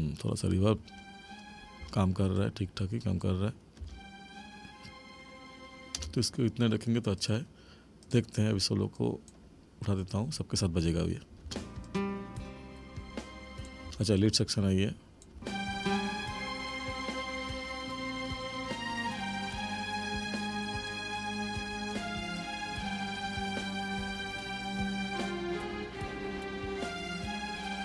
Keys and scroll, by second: 0.7 space, 3.8 space, 6.0 space, 11.4 space, 13.8 space, 15.4 space.